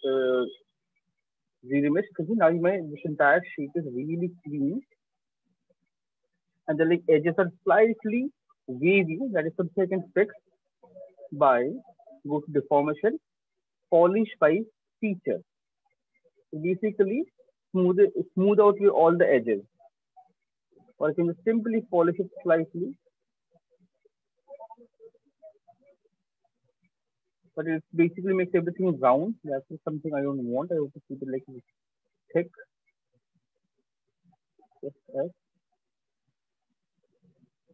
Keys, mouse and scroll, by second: 5.0 shift+click, 5.7 right click, 7.4 right click, 7.8 click, 9.9 shift+click, 10.6 click, 11.6 click, 15.2 click, 17.1 click, 20.8-22.2 drag, 24.5-26.7 drag, 28.7 ctrl+z, 29.8 right click, 30.3 click, 30.8 click, 32.2 shift+click, 33.6 click, 34.4 f, 35.6 right click, 36.2 alt+click.